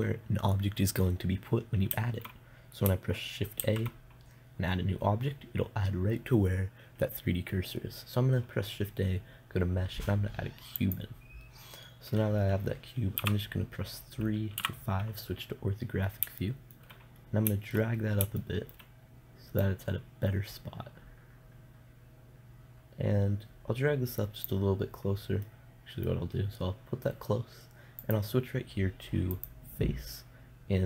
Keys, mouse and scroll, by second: 4.0 shift+a, 13.6 KP_3, 15.0 KP_5, 20.0-21.9 drag, 21.9 middle click, 26.0-28.5 middle drag, 28.5-30.4 drag.